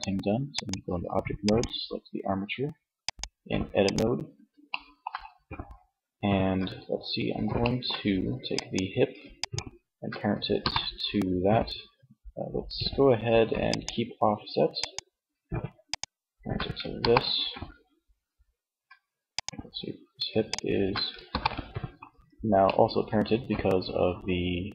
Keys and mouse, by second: 3.8 middle click, 7.8-9.6 drag, 9.6 ctrl+p, 13.9-14.9 right drag, 16.1 ctrl+p, 20.2 ctrl+p, 21.9-23.1 middle drag.